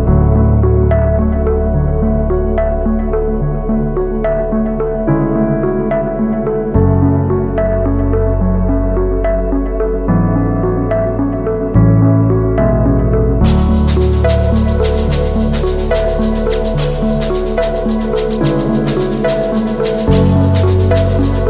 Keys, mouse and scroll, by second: 4.6 ctrl+=, 6.3 ctrl+t, 7.8 alt+shift+click, 11.5 alt+shift+click, 14.8 alt+shift+click, 16.7 Up, 17.0 Up, 17.7 Right, 18.2 Up, 18.5 Left, 19.1 Return, 19.9 ctrl+-, 20.3 ctrl+-.